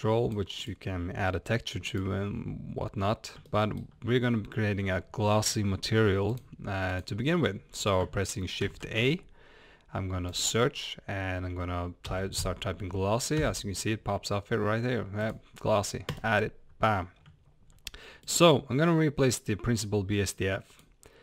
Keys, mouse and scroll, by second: 20.8 click.